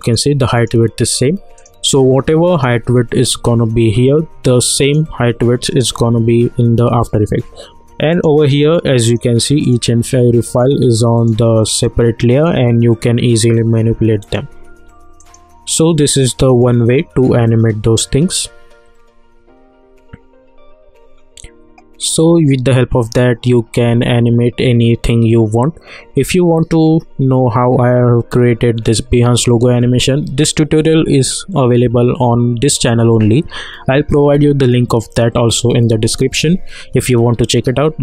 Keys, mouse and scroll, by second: 0.0 click, 4.8 click, 8.1 click, 23.0 click, 23.7 s.